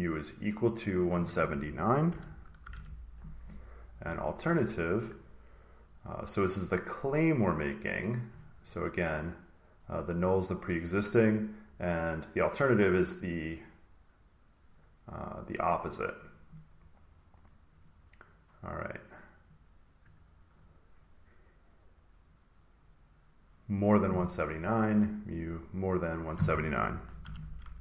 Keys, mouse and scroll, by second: 1.2 click, 3.9 click, 7.2 click, 8.9 click, 10.3 click, 11.3 click, 15.2 click, 16.7 click, 19.3 click, 24.5 click, 25.5 click, 26.1 click, 27.1 1.